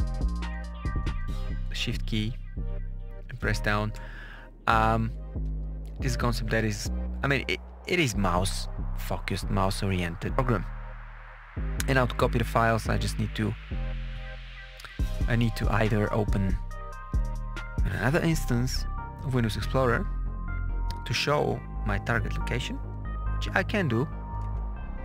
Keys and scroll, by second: 0.2 Up, 1.6 shift+Down, 24.4 super+e.